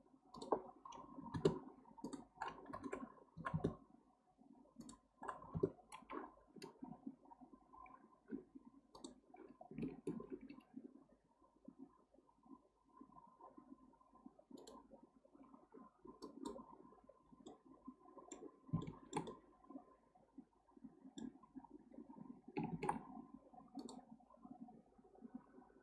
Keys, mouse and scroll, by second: 0.3-7.8 drag, 8.9 alt+click, 10.3 ctrl+b, 16.2 drag, 17.1-17.5 scroll down 2, 17.5-18.5 middle drag, 18.5 scroll up 2, 18.8-21.4 shift+middle drag, 21.4-22.3 scroll up 2, 22.7 ctrl+r.